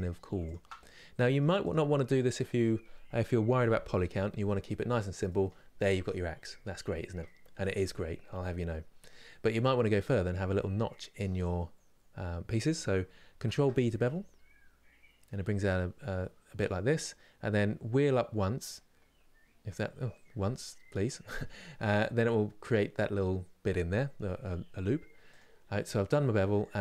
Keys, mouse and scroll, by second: 0.2 alt+Left, 0.5 middle click, 1.4 Left, 4.2-4.7 scroll down 10, 4.9-8.5 middle drag, 8.5 scroll up 2, 10.1-10.6 scroll up 8, 10.6 middle click, 11.1 scroll down 1, 11.7 scroll down 1, 13.2 ctrl+b, 25.9-26.8 middle drag.